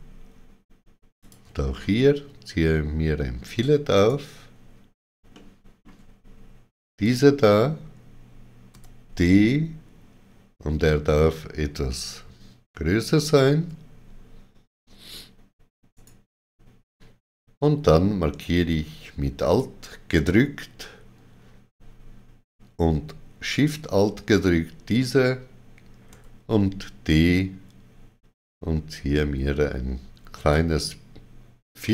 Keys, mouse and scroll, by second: 1.1 alt+shift+click, 1.7 middle click, 3.9 right click, 5.2 shift+middle click, 6.9 click, 8.6 d, 13.1 shift+click, 15.8 right click, 19.3 shift+click, 23.4 alt+shift+click, 26.0 d, 30.3 alt+shift+click.